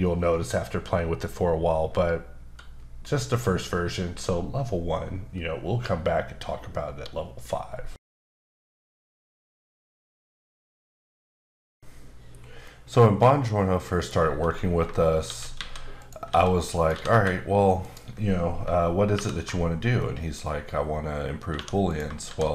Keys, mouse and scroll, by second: 14.4 Tab, 15.2 shift+d, 15.9 click, 16.2 s, 16.9 g, 17.8 click, 19.1 ctrl+alt+KP_Subtract, 20.0 middle click, 20.4 scroll up 1, 21.5 2, 22.2 shift+s.